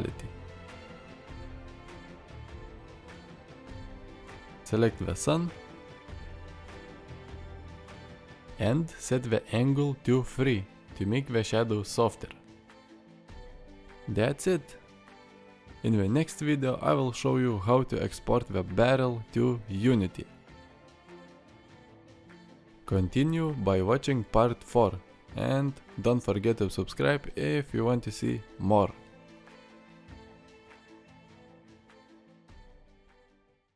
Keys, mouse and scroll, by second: 1.3 click, 9.4-11.0 drag, 11.1 click, 12.2 click, 14.3 click, 15.8 shift+click, 16.7 ctrl+space, 17.5-17.8 drag, 17.8 middle drag, 18.5-19.1 middle drag, 19.7-20.4 middle drag.